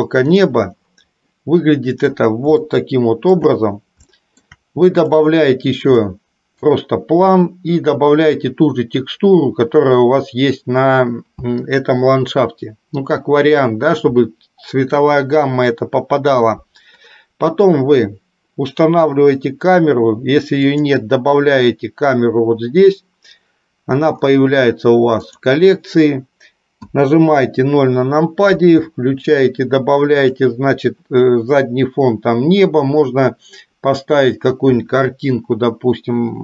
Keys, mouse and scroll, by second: 0.6 click, 1.5 middle click, 3.0 shift+middle click, 4.2 shift+middle click, 5.3 click, 6.2 middle click, 20.8-23.4 drag, 25.3 click, 27.1 KP_0, 30.4 click.